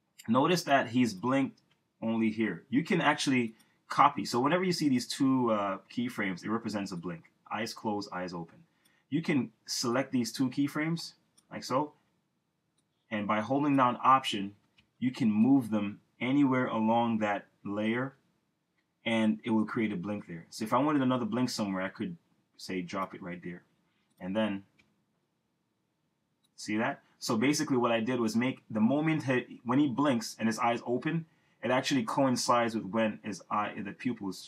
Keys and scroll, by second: 1.8 Return, 24.9 Return.